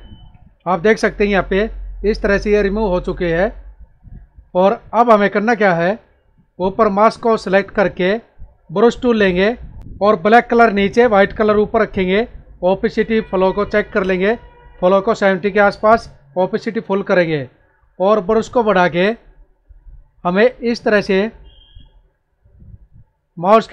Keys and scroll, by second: 0.1 ctrl+-, 0.9 ctrl+=, 4.5 ctrl+=, 9.8 ctrl+z.